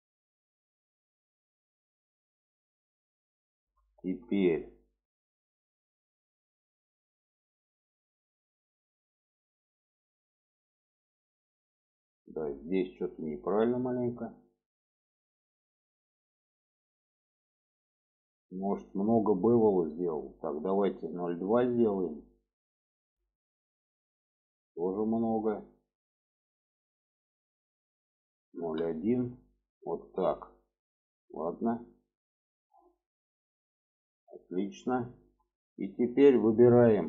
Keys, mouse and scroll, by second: 0.1-1.7 middle drag, 2.1-3.5 middle drag, 3.7 shift+middle click, 5.2-7.3 middle drag, 7.9 shift+middle click, 11.0 middle click, 13.4 middle click, 14.1 shift+middle click, 15.1 middle click, 16.7 middle click, 24.4 shift+middle click, 30.0 shift+middle click, 31.3 middle click, 32.5 middle click, 33.3-34.6 middle drag, 34.9 shift+middle click, 35.7 shift+middle click.